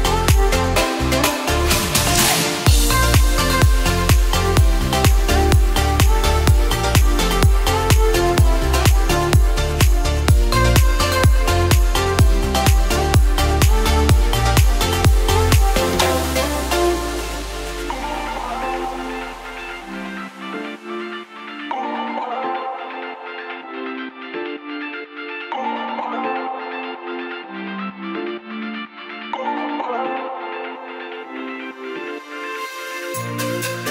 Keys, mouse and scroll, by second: 2.2 alt+click, 2.9 ctrl+b, 8.4 s, 12.5-13.7 scroll up 3, 14.3 x, 16.5 alt+click, 17.4 ctrl+b, 23.3-23.8 scroll up 1, 23.8-25.0 scroll down 1, 25.2 alt+click, 26.1 ctrl+b, 29.8 click, 31.0 alt+click, 31.9 ctrl+b.